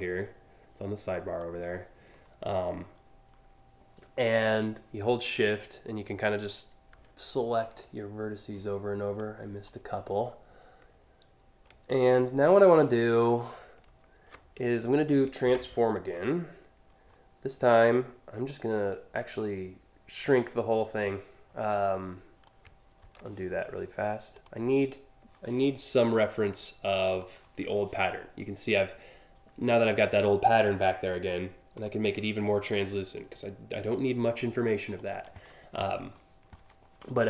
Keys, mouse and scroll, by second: 8.8-9.3 shift+drag, 15.7 ctrl+t, 18.1-22.1 drag, 22.6 ctrl+z, 23.9 click, 25.6 click, 26.7 click, 31.4 click, 32.4-34.6 drag.